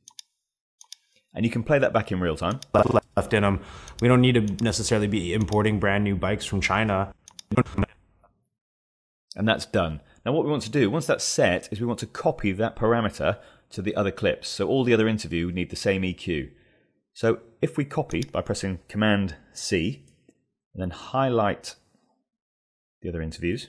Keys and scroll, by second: 18.9 super+c.